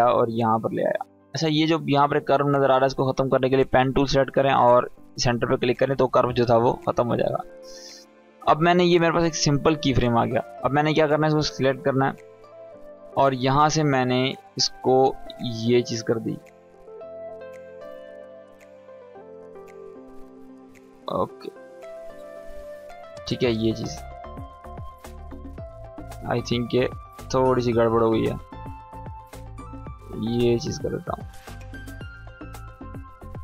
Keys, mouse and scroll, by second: 3.3 click, 9.0-11.7 drag, 14.1-15.0 drag, 18.9-19.6 drag, 23.8 space, 25.0-25.7 drag, 31.6 space.